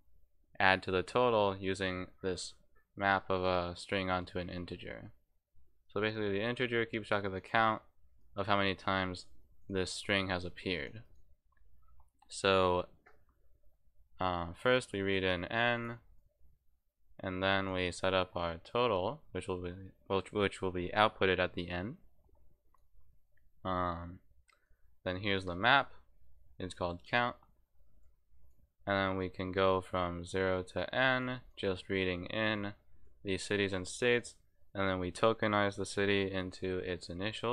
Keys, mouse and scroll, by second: 5.8 click, 7.4 click, 8.2 click, 9.6 click, 10.0 click, 11.0 click, 14.4-15.8 drag, 16.1 click, 16.6-17.7 drag, 22.7 click, 23.2-24.6 drag, 27.9 click, 28.4 click, 29.2 click, 29.9 click, 30.2 click, 31.4 click, 32.2 click, 34.2-35.4 drag.